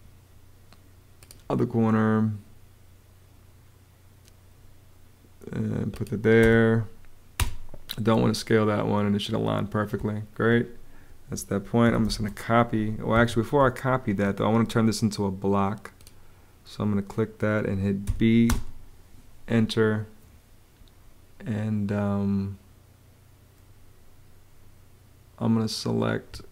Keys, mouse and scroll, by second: 6.1 space, 9.7 space, 11.3-12.3 typing, 13.0 Escape, 13.3 space, 17.8 b, 18.2 space, 26.0 Escape.